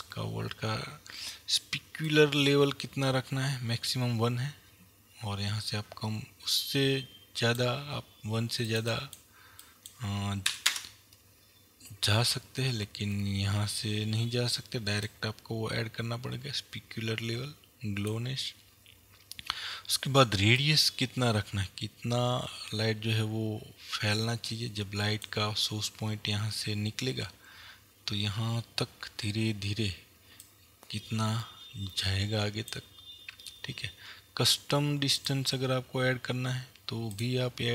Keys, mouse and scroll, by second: 11.3 KP_Enter, 37.2 click.